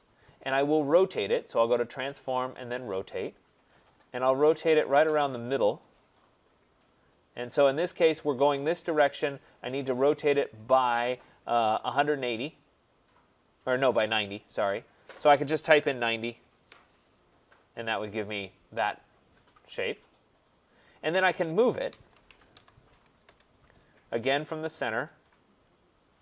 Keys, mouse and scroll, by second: 1.6 click, 2.9 click, 3.5-3.8 scroll, 5.9 click, 8.0 middle click, 9.8 click, 15.8 typing, 16.5 Return, 17.8 middle click, 17.8-20.9 scroll up 4, 20.9 scroll down 5, 21.6-23.0 typing, 23.0 scroll, 23.2 Return, 25.2 click, 25.4-25.8 scroll.